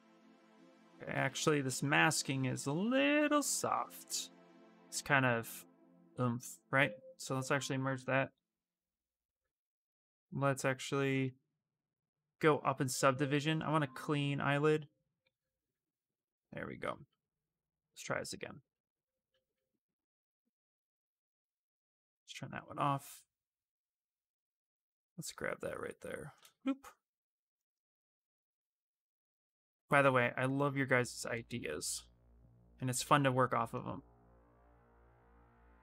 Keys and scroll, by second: 0.0 ctrl+z, 0.4 ctrl+z, 0.5 ctrl+z, 1.0 ctrl+z, 1.3 ctrl+z, 1.6 ctrl+z, 1.8 ctrl+z, 2.1 ctrl+z, 2.7 ctrl+z, 3.0 ctrl+z, 3.2 ctrl+z, 3.4 ctrl+z, 3.6 ctrl+z, 3.9 ctrl+z, 4.1 ctrl+z, 4.3 ctrl+z, 4.5 ctrl+z, 4.6 ctrl+z, 4.8 ctrl+z, 5.0 ctrl+z, 5.1 ctrl+z, 8.0 shift+d, 8.2 shift+f, 9.0 ctrl+d, 10.0 Escape, 11.0 d, 15.0 ctrl+d, 15.6 shift+f, 23.9 ctrl+space, 30.9 ctrl+space.